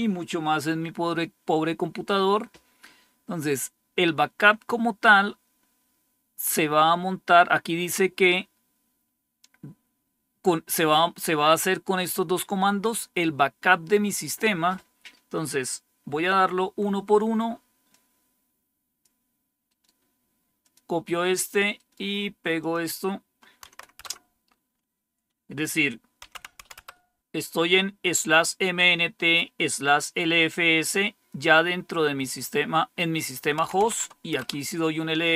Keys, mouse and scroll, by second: 14.1 click, 17.8-19.0 drag, 19.6 right click, 20.5 click, 21.7 right click, 22.2 right click, 22.5 click, 23.6 Tab, 23.9 Return, 25.9-27.2 typing, 33.5-33.8 typing, 34.3 Return.